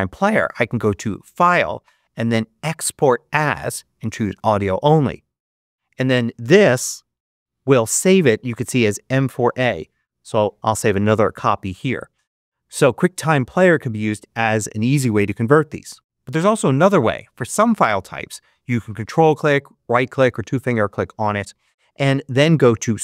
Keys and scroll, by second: 6.8 Right, 7.1 2, 9.7 super+d, 10.1 super+Return, 10.8 Return.